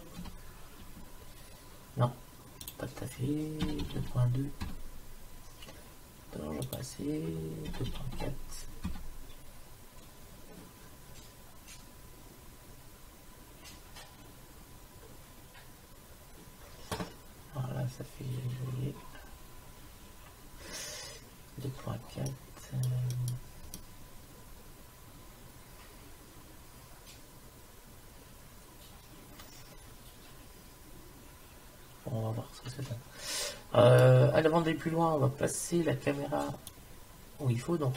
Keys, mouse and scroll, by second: 2.7-4.5 drag, 6.7-8.5 drag, 14.5-18.0 middle drag, 22.3 middle click, 23.3 middle click, 25.9 middle click, 36.7 click, 37.2 click, 37.4 click.